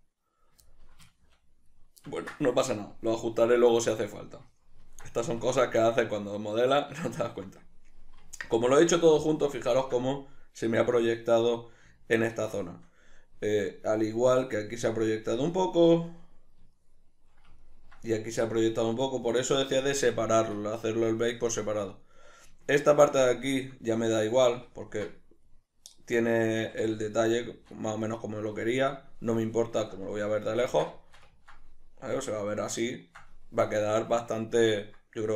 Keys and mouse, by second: 0.1-2.8 middle drag, 5.6 Tab, 6.4 middle click, 8.6-18.3 ctrl+middle drag, 20.5-35.3 ctrl+middle drag, 27.0 a.